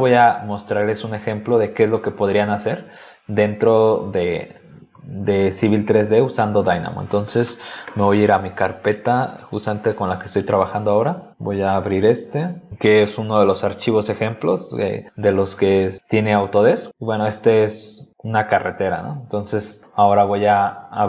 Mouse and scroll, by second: 1.8 click, 8.6 click, 9.2 click, 10.6 click, 12.2 click, 19.4 middle click, 20.9 click.